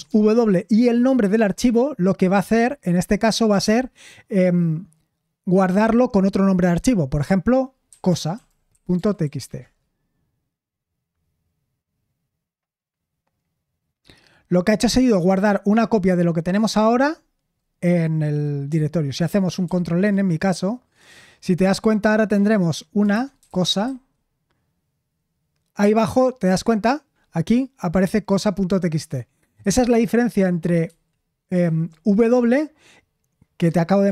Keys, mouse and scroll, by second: 0.0-0.5 typing, 8.4-9.9 typing, 19.6 ctrl+n, 23.0-24.3 typing, 31.6 ctrl+n.